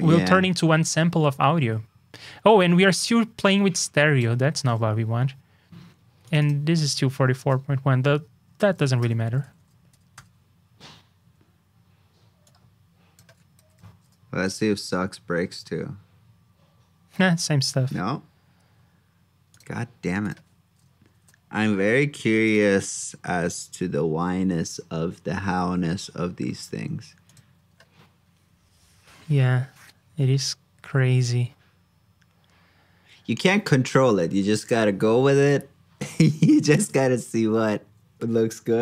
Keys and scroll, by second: 13.5 super+c, 14.0 super+j, 21.1 super+j.